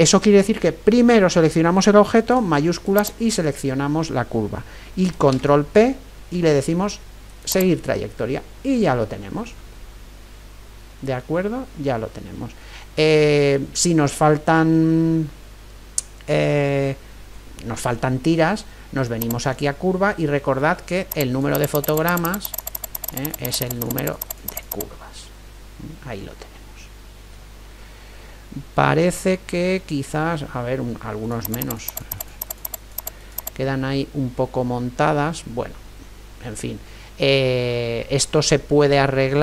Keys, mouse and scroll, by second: 3.0-5.2 right drag, 5.5 ctrl+p, 10.0 middle click, 11.8-19.2 middle drag, 19.2-26.6 drag, 25.5-27.5 middle drag, 27.8-28.7 scroll up 3, 28.7 middle click, 28.9 scroll up 1, 29.0-31.4 middle drag, 31.4-35.1 drag, 34.0-36.0 middle drag, 38.0 middle click, 38.1 scroll up 1, 38.2-39.4 middle drag.